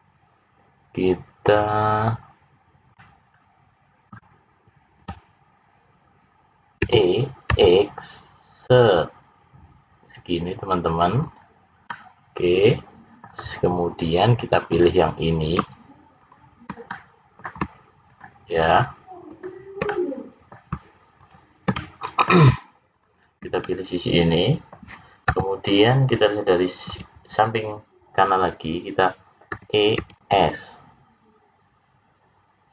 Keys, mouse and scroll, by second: 2.8 middle click, 6.8 e, 11.8 middle click, 14.5 click, 16.1 shift+click, 16.8 middle click, 18.0 shift+click, 19.2 shift+click, 19.8 middle click, 21.1 shift+click, 21.7 middle click, 22.9 shift+click, 23.6 middle click, 29.5 e.